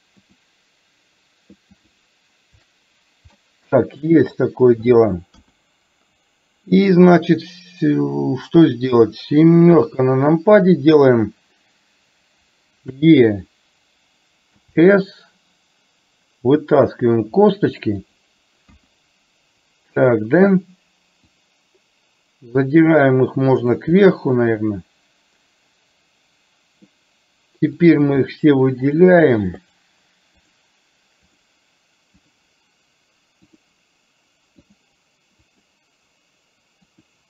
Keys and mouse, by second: 0.4 shift+click, 1.8 shift+click, 3.4 middle click, 5.4 KP_1, 9.8 KP_7, 13.0 e, 18.8 KP_1, 21.4-23.8 drag, 24.0-27.0 middle drag, 29.7 shift+click, 31.4 shift+click, 32.2 shift+click, 33.5 shift+click, 34.7 shift+click, 35.5 shift+click, 36.9 shift+click.